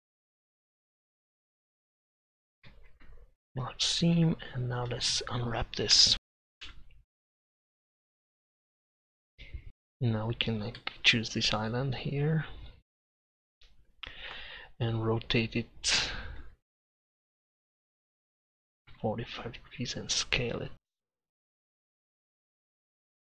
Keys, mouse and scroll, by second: 2.9 ctrl+e, 4.2 Tab, 4.6 Tab, 4.9 a, 5.1 a, 6.0 u, 6.6 u, 9.2 middle click, 16.5 r, 21.0 s, 22.6 g.